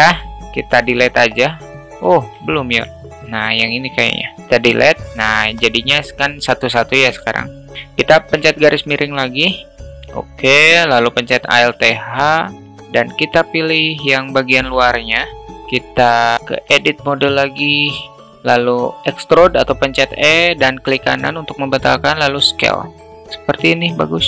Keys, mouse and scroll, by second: 0.5 Delete, 1.6 alt+middle drag, 1.9 ctrl+z, 2.2 alt+middle drag, 4.1 Delete, 4.7 alt+middle click, 5.0 click, 9.4 /, 11.3 alt+h, 13.2 click, 13.7-14.1 shift+middle drag, 16.9 alt+shift+middle drag, 17.7 Tab, 18.4 a, 18.7 e, 21.8 s, 23.3 alt+middle click.